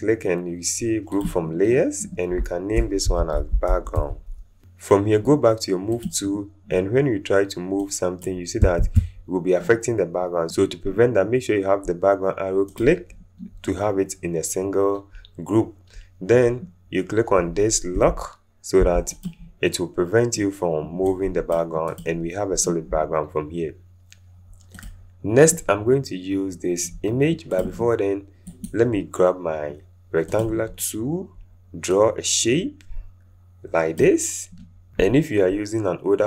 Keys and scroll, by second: 2.9-4.4 typing, 8.8 ctrl+z.